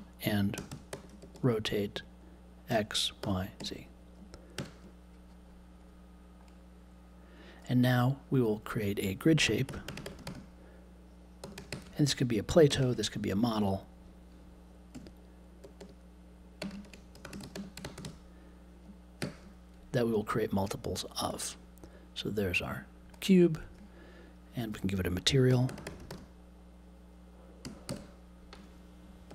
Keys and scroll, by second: 0.0-2.6 typing, 4.5 super+j, 9.4-10.8 typing, 12.6 BackSpace, 14.9-18.5 typing, 25.2-28.4 typing, 29.2 super+j.